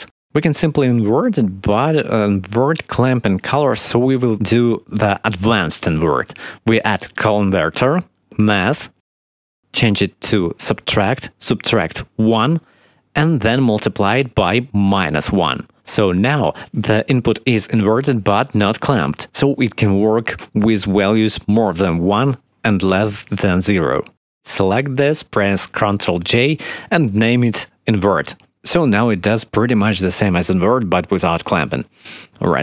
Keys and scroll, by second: 7.5 shift+a, 12.2 1, 13.5 shift+d, 16.8 -, 17.0 1, 26.1 ctrl+j, 27.7-29.5 typing, 28.6 Return.